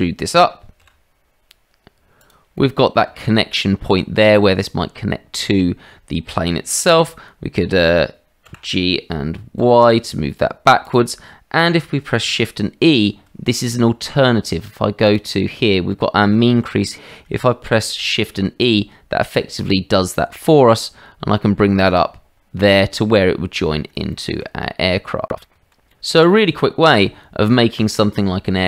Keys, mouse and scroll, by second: 0.8 e, 2.5 middle click, 8.4 g, 18.0 shift+e, 23.1 middle click, 24.1 shift+middle click, 25.3 middle click, 25.5 Tab, 25.9-26.3 drag, 26.9-27.7 middle drag, 28.0 shift+middle drag.